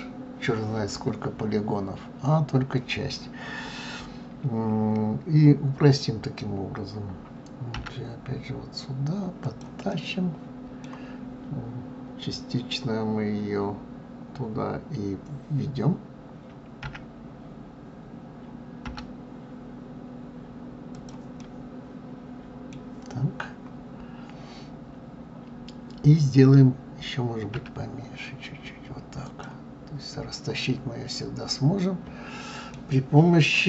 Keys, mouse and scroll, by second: 9.9-12.9 middle drag, 21.4-24.3 middle drag, 30.6-33.6 middle drag.